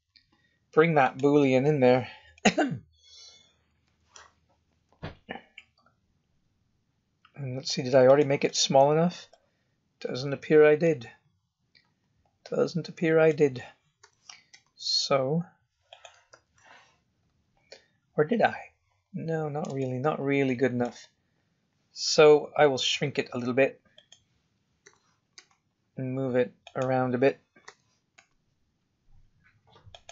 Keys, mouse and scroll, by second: 1.4-2.2 scroll up 1, 2.2 scroll up 1, 2.3 middle click, 3.8 KP_7, 4.8 g, 8.4 middle click, 9.6-10.2 scroll up 4, 10.2-10.8 scroll down 4, 10.8 middle click, 14.0 g, 16.3 KP_1, 16.8-17.5 scroll up 6, 18.3 scroll down 1, 19.7 shift+middle click, 22.1 s, 24.8 g, 27.6 g.